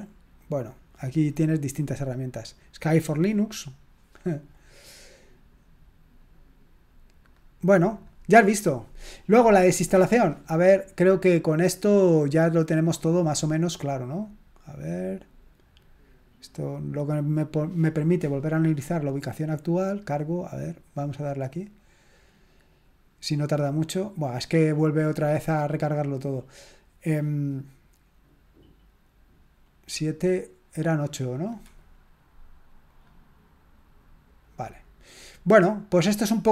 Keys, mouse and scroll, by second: 5.6-6.2 scroll down 2, 6.2-6.9 scroll up 2, 7.2 click, 7.9 click, 12.2 click, 14.0 click, 31.3 click, 32.8 click, 34.4 click.